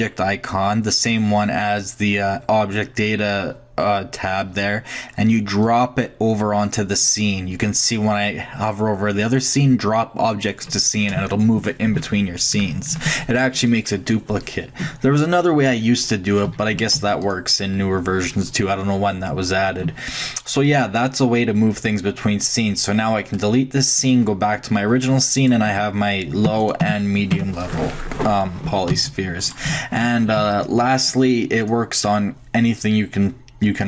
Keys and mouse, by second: 5.6-7.4 drag, 16.5 a, 16.7 a, 16.9 x, 18.0-20.0 middle drag, 24.0-25.4 drag, 25.7 Tab, 26.5 Tab, 26.8 Tab, 27.3 Tab, 28.4 middle drag, 28.6-30.3 typing, 31.6-32.1 drag.